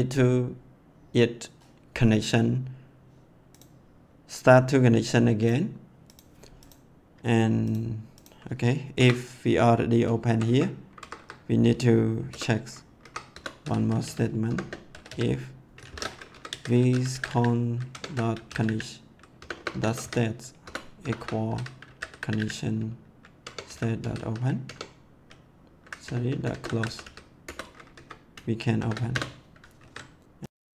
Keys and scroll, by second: 8.9 Return, 10.2 Down, 10.9 Up, 12.2 Return, 13.0 Up, 13.3 Return, 13.6-24.6 typing, 16.3 Left, 20.6 Return, 23.4 Tab, 26.0-27.5 typing, 27.9 Right, 28.7 shift+[, 29.0 Return, 29.7 ctrl+s.